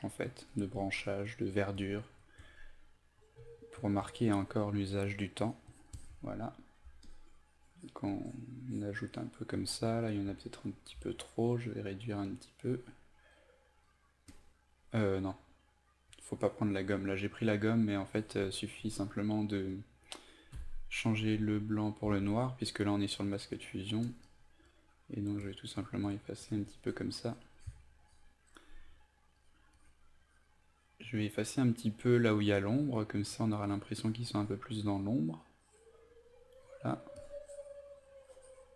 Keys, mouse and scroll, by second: 9.9 e, 10.4 alt+right click, 11.7 click, 14.0 click, 20.1 click, 20.6 x, 21.6 alt+right click, 23.4-38.7 drag.